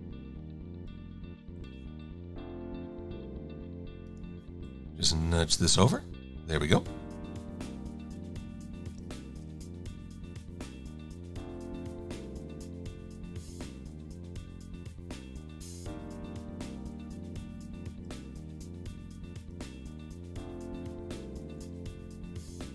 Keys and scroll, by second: 2.2 Up, 4.9 Left, 9.3 shift+c, 13.3 a, 22.1 shift+x.